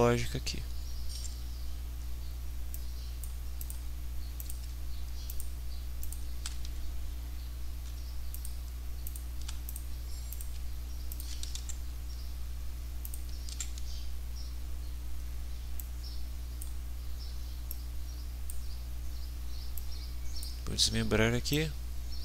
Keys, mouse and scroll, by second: 1.1 ctrl+d, 2.7-3.4 drag, 3.6 click, 4.4 click, 5.2 shift+click, 6.0 shift+click, 8.3 shift+click, 9.0 shift+click, 9.6 shift+click, 10.3 shift+click, 11.1 shift+click, 11.6 ctrl+shift+d, 13.0 click, 13.5 ctrl+d, 15.8-16.8 drag, 17.7-18.6 drag, 19.7-20.6 drag, 21.5-22.2 drag.